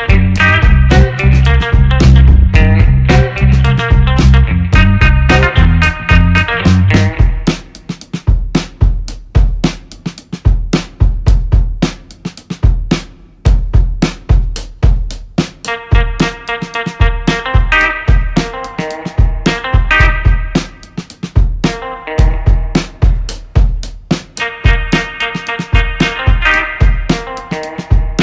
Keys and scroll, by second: 7.0 1, 7.4 6, 7.5 Return, 9.2 1, 9.7 6, 9.8 Return, 11.5 space, 13.8 1, 14.1 6, 14.3 Return, 16.5 ctrl+c, 16.7 ctrl+v, 17.2 Down, 19.3 shift+a, 19.5 k, 19.7 u, 19.9 n, 22.4 1, 22.8 6, 23.0 Return, 24.3 space, 26.3 ctrl+c, 27.3 ctrl+v.